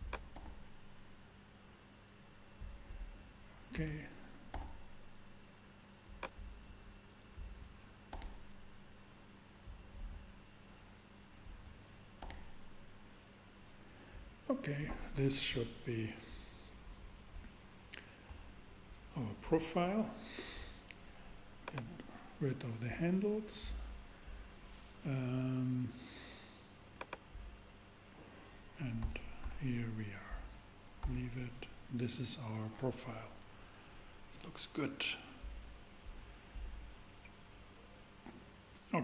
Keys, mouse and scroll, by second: 0.3 g, 1.2 g, 4.5 super+g, 8.1 g, 8.6 g, 12.2 g, 12.7 g, 18.8 shift+a, 20.1 shift+a, 21.6 click, 23.6 middle click, 26.9-28.9 drag, 29.0 a, 29.4 a, 31.0 Tab.